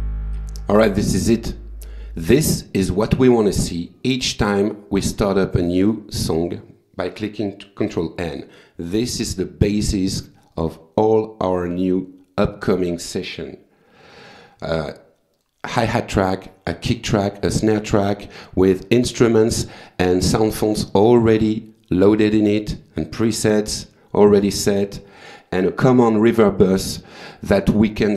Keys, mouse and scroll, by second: 1.7 click, 2.8 click, 6.9 click, 7.5 click, 8.2 click, 8.8 click, 12.9 click, 14.7 click, 15.5 click, 22.4 click, 26.4 click.